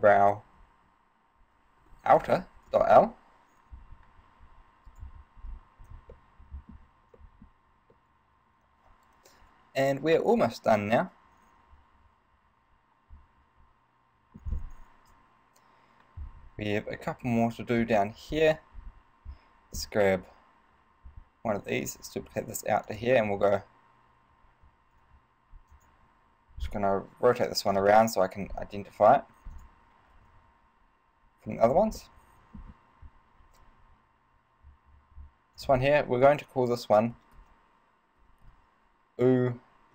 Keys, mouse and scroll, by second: 5.1 right click, 5.6 scroll down 4, 6.3 shift+middle click, 7.4 shift+middle click, 8.1 middle click, 15.2 KP_3, 16.8 scroll down 1, 17.3 shift+middle click, 18.0 right click, 18.5-19.3 scroll up 4, 22.0 shift+d, 23.2 click, 24.8 ctrl+alt+s, 26.0 click, 26.3 r, 28.9 s, 29.8 click, 30.4 ctrl+alt+s, 31.9 click, 32.2 middle click.